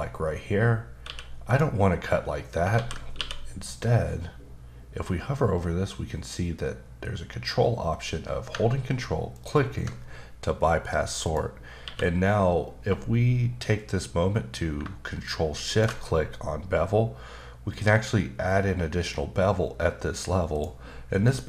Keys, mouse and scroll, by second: 1.0 q, 1.4 click, 2.7 ctrl+z, 9.3 ctrl+click, 11.8 q, 15.6 ctrl+shift+click, 20.5 click, 21.2 click.